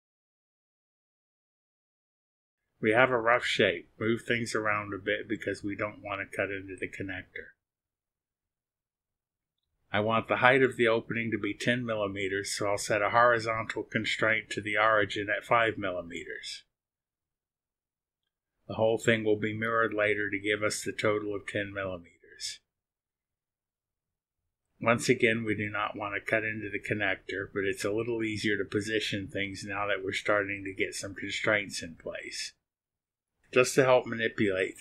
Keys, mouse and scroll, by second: 0.6 click, 2.4 click, 4.1-7.5 drag, 10.4 click, 12.0 click, 14.4 click, 18.0 KP_5, 22.4 click, 28.4-31.6 drag, 32.8 click.